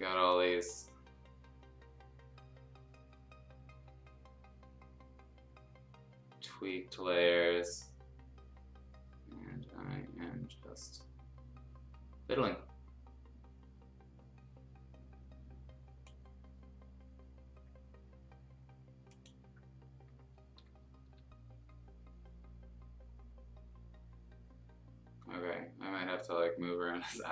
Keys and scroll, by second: 21.0 F2.